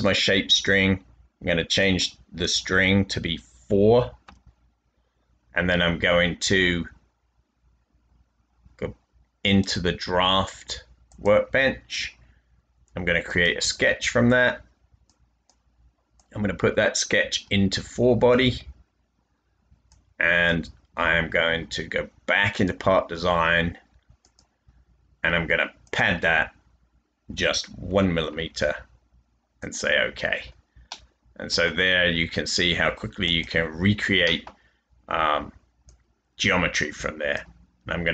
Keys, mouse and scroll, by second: 4.2 typing, 27.0-27.8 typing, 30.8 middle click.